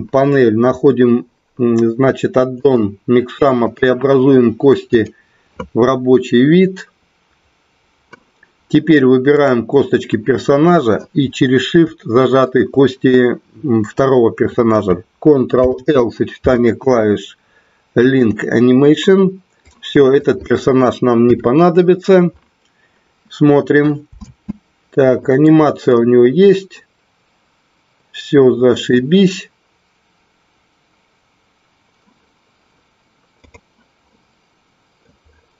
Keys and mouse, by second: 2.7 click, 3.7-7.4 drag, 9.3 click, 12.4 shift+click, 15.5 ctrl+l, 19.6-20.3 drag, 21.4 Delete, 24.1 space, 25.5 middle click, 26.0-29.3 middle drag, 33.6 click, 34.1 middle click.